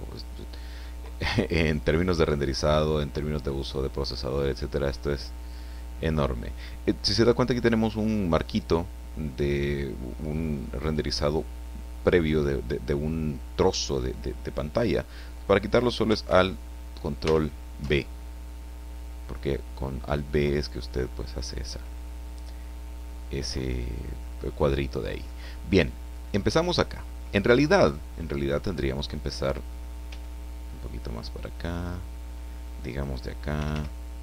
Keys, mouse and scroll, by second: 17.2 ctrl+alt+b, 30.0 g, 32.9 click, 33.5 r.